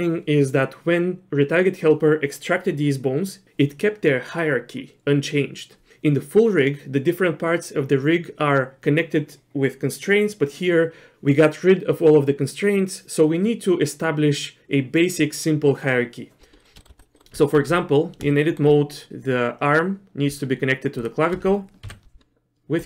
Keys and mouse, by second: 16.6 middle click, 16.8 shift+middle click, 17.2 middle click, 17.3 Tab, 18.3 shift+middle click, 21.8 ctrl+p.